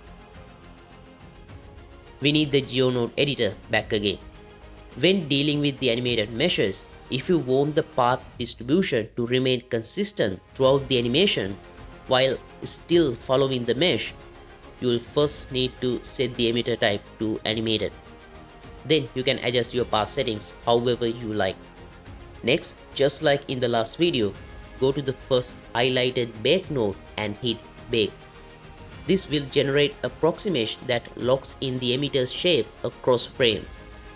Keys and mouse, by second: 2.1 click, 2.8-4.0 drag, 4.8 space, 5.1-5.9 drag, 6.1 click, 7.1 click, 9.7 n, 18.9-19.7 drag, 20.2 g, 21.2 g, 28.1 click, 30.5-31.5 drag.